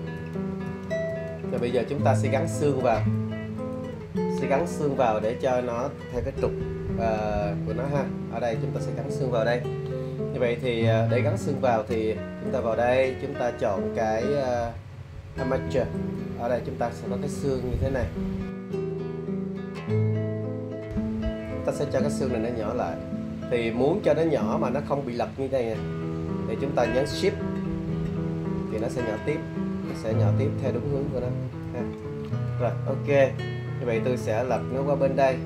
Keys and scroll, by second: 0.2 super+z, 6.6 `, 18.5 super+z.